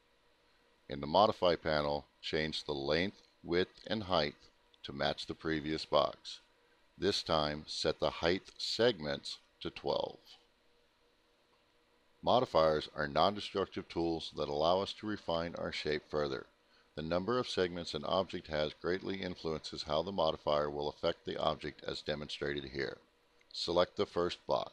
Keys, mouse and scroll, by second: 0.3 click, 2.2 click, 2.7 click, 4.0-4.7 typing, 4.7 Tab, 5.4 Tab, 6.0 typing, 9.0 BackSpace, 9.7 6, 10.2 Tab, 11.6 click, 12.5-13.5 typing, 13.5 Return, 15.8 alt+middle click, 16.8 alt+middle click, 23.0 click.